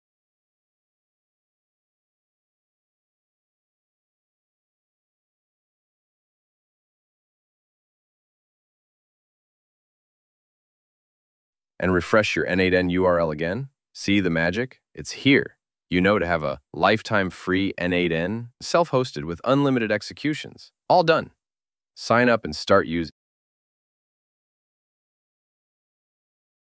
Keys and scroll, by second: 8.4 super+c, 13.3 super+v.